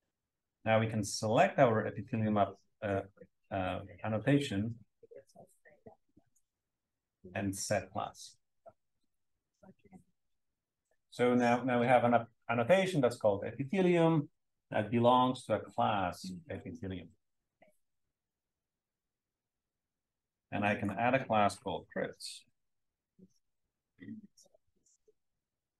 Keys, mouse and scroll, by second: 1.3-5.0 drag, 6.3 click, 9.0 click, 19.2-20.6 right drag, 20.6 click, 22.0-24.1 typing, 25.5 Return.